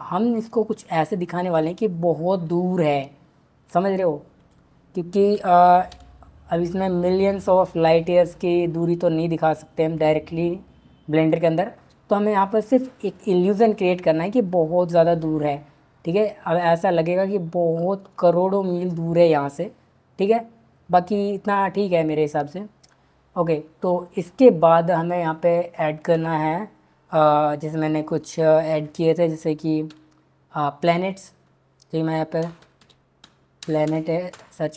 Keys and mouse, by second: 4.4 click, 5.3 g, 5.9 z, 7.8 click, 8.6 click, 25.0-29.9 drag, 29.9 b, 31.3 BackSpace, 34.3-34.7 middle drag.